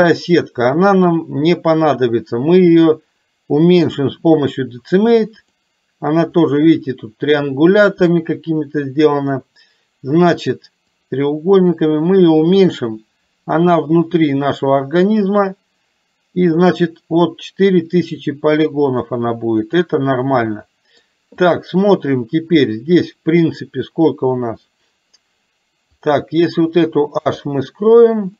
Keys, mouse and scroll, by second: 3.9-5.7 drag, 11.0-15.7 drag, 19.0-20.0 drag, 20.6 middle click, 21.5 click, 22.7 middle click, 27.2 h.